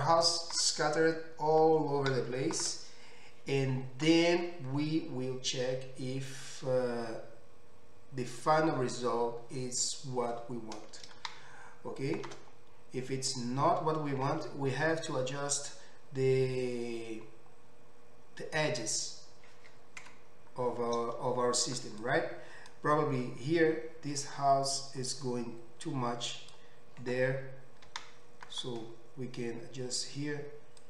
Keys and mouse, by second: 7.6-11.7 middle drag, 12.3-22.1 middle drag, 20.1 Tab, 22.1-30.8 drag, 27.9 g.